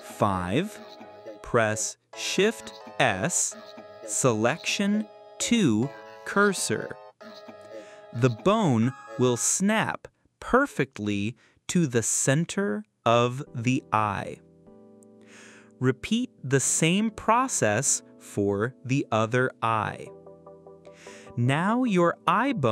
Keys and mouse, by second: 1.2 ctrl+z, 2.3 shift+s, 6.1-8.1 drag, 8.9-9.4 drag, 10.4 click, 10.9 click, 12.2-12.9 drag, 14.1 click, 14.9 click, 15.4 click, 15.9 click, 16.4 click, 16.7 click, 20.9 click.